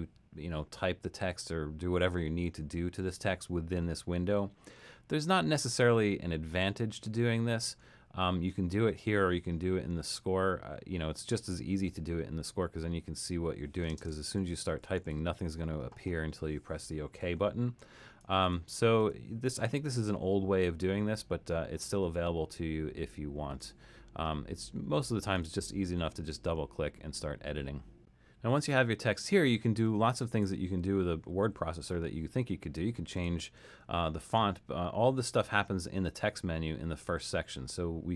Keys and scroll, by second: 13.9-15.6 typing, 18.4 BackSpace, 19.0 BackSpace.